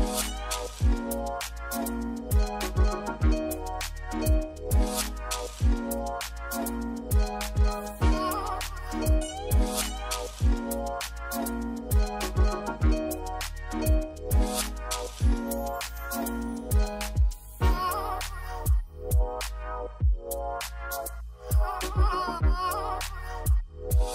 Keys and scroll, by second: 0.0 f, 1.0-1.9 typing, 8.2 z, 9.5 c, 10.9-12.3 typing, 12.3 Escape, 14.6-15.3 typing, 20.9-22.3 typing.